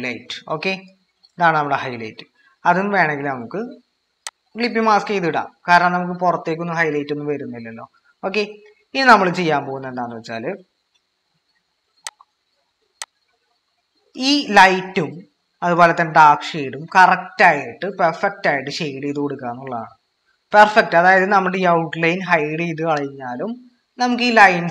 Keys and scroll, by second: 0.0-0.3 typing.